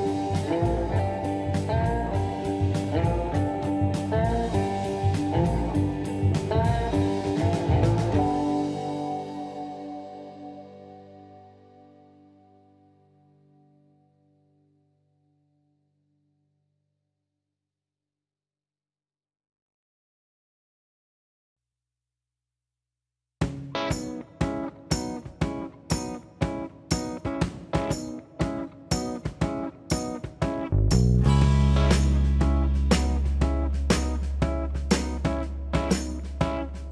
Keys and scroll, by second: 2.0 shift+space, 2.8 shift+m, 6.4 shift+/, 6.7 Return, 6.7 4, 15.1 ctrl+c, 16.9 ctrl+v, 29.7 shift+space, 29.8 Escape, 34.6 ctrl+shift+c, 36.7 ctrl+v.